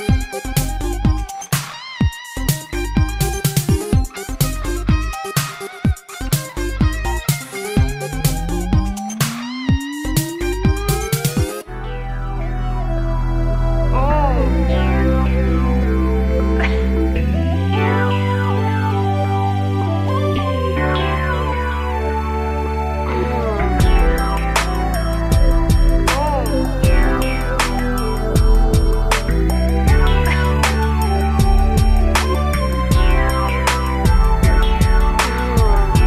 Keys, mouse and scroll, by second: 0.8 Escape, 2.1 click, 5.7 r, 7.3 click, 7.4 click, 8.2 click, 8.2 click, 9.9 click, 10.0 click, 10.3 g, 10.8 click, 11.0 click, 11.4 click, 12.2 shift+space, 14.3 Escape, 14.7 ctrl+s, 15.0 scroll down 1, 15.1 middle click, 15.4 shift+space, 17.9 Escape, 18.2 ctrl+s, 19.0 shift+space, 23.9 Escape, 24.8 3, 25.5 scroll up 1, 26.8 click, 32.2 click, 32.3 click, 34.1 click.